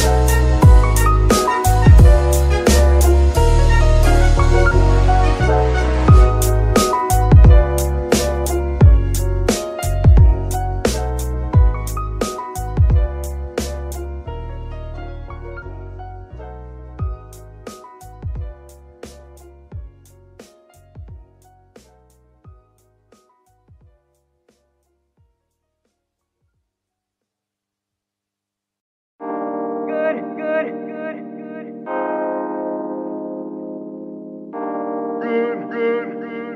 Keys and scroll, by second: 0.1 KP_3, 1.2 z, 9.5 g, 9.8 Escape, 14.5 KP_3, 30.1 z, 35.8 a, 35.9 r.